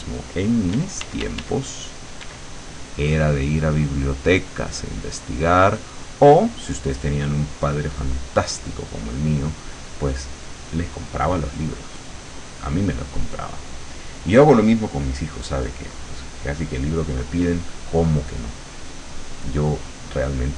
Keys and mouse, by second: 0.8 d, 2.3 d, 2.8-10.1 drag, 19.1 click.